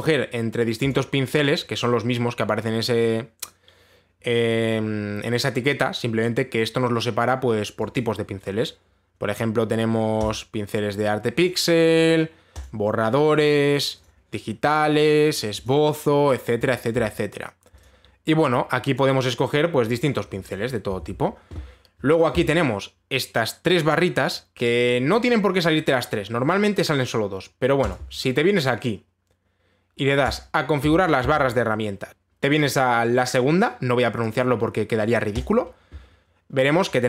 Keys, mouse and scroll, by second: 1.5 click, 8.5 click, 9.7 middle click, 10.9 click, 12.1 click, 13.2 click, 13.8 click, 14.6 click, 15.4 click, 16.3 click, 17.4 click, 18.4 click, 19.6 click, 21.1 click, 21.6 ctrl+z, 28.5 click, 30.9-32.1 click, 32.5 click, 33.3 click, 36.0 click.